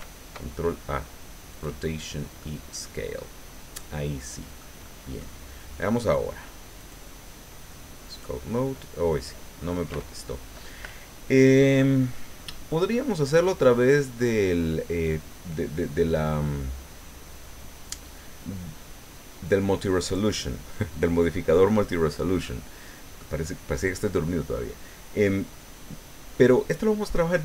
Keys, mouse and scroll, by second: 1.5 click, 2.4-4.8 drag, 6.8 click, 8.1 click, 25.3-27.2 middle drag.